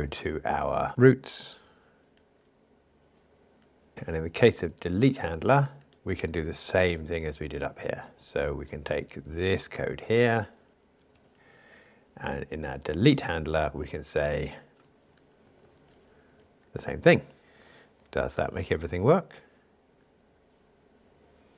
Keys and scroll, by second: 0.9 super+1, 2.3 super+e, 5.9 super+b, 11.3 super+c, 16.6 super+v, 18.4 ctrl+r.